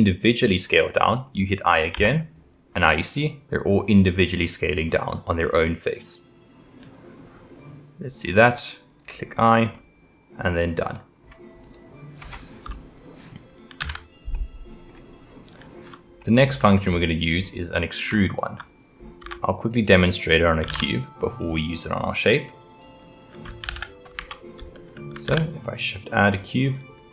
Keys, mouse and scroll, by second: 9.4-11.6 middle drag, 11.6 click, 12.2 scroll down 2, 13.8 ctrl+z, 14.3-16.8 middle drag, 16.8-17.3 scroll up 1, 17.3-18.1 scroll down 2, 18.1-19.2 shift+middle drag, 19.2 `, 20.7 shift+a, 23.7 ctrl+z, 24.2 Tab, 25.3 shift+a.